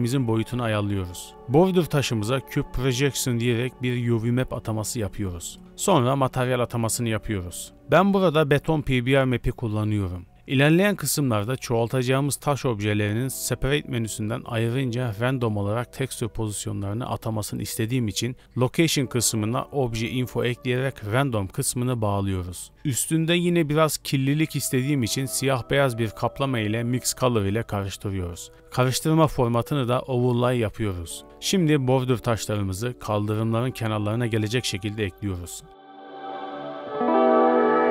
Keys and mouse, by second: 0.6 Tab, 0.9 click, 1.3 a, 1.7 shift+click, 2.7 u, 3.5 Tab, 5.2 click, 5.9 drag, 7.0 KP_Decimal, 11.9 click, 12.8 z, 13.5 z, 15.1 click, 15.7 x, 16.1 click, 16.2 x, 17.6 click, 18.4 shift+a, 20.9-22.1 drag, 22.7 shift+d, 23.6 drag, 25.4 middle click, 26.2 click, 28.4 middle click, 29.4-30.2 drag, 30.7 middle click, 31.8-33.1 drag, 33.1-33.6 middle drag, 33.6 click, 33.7-34.9 middle drag, 34.9 click, 35.7 g, 36.6 g, 36.7 click, 36.8 click, 36.9 click, 37.1 shift+click, 37.4 s.